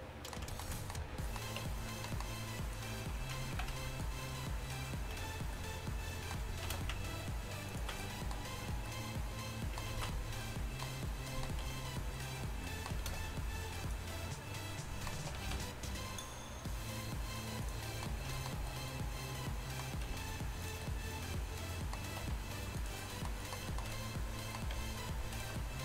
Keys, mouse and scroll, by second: 0.2 middle click, 1.0 middle click, 1.7 Tab, 2.9 drag, 3.2 z, 3.6 z, 6.7 shift+d, 10.2 ctrl+z, 11.7 g, 13.1 shift+d, 15.4 r, 17.9 middle drag, 22.3 r, 22.8 g, 23.2 drag, 24.8 g.